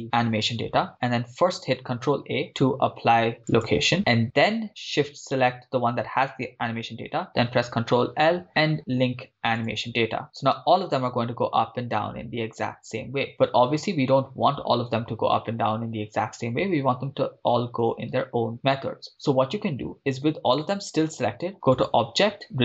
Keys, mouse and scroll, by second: 1.9 ctrl+a, 5.4 shift+right click, 7.6 ctrl+l, 10.6 shift+space, 13.5-13.8 scroll down 1, 18.2 shift+space, 20.0 click, 21.8-22.6 drag.